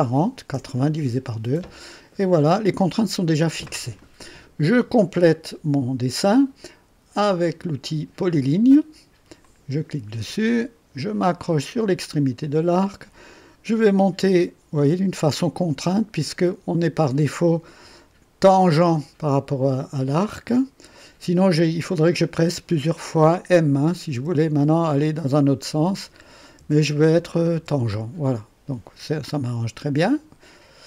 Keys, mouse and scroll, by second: 0.5 KP_Enter, 9.4 click, 12.4 click, 24.1 m, 24.9 m, 26.5 m, 27.0 m, 27.5 m.